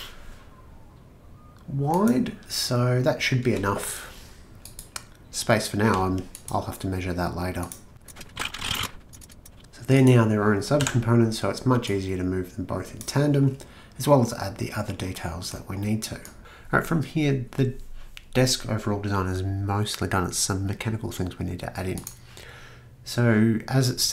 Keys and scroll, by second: 3.4 Return, 8.1-11.8 typing.